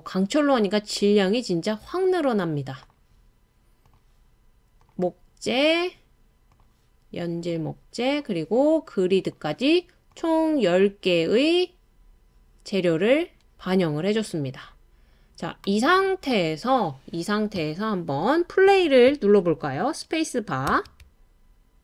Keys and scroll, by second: 20.7 space.